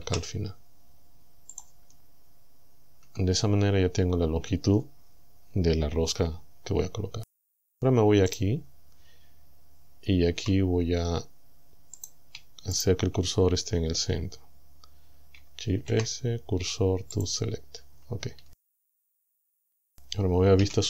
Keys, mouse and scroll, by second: 0.1 Delete, 1.6 click, 3.1 Tab, 8.3 right click, 10.4 Tab, 12.0 right click, 12.8 shift+right click, 15.8 shift+s, 17.2 click, 18.4 Tab, 20.6 KP_7.